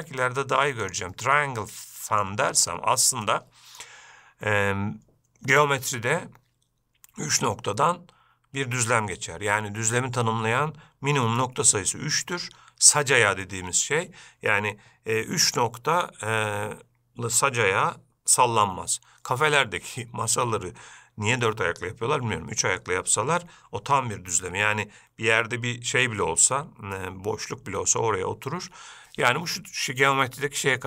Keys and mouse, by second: 1.6-2.4 middle drag, 3.5-4.0 middle drag.